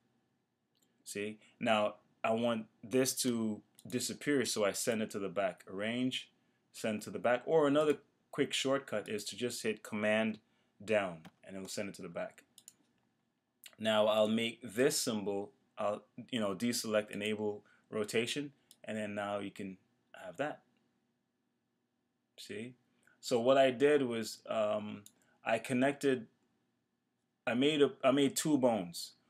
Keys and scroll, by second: 11.2 super+Down.